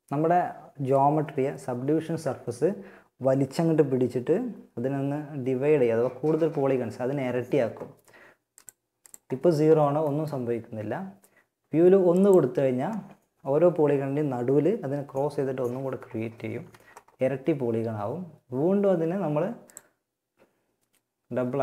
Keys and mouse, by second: 7.7-10.0 drag, 11.3-13.2 drag, 15.8 z, 18.8-20.8 drag.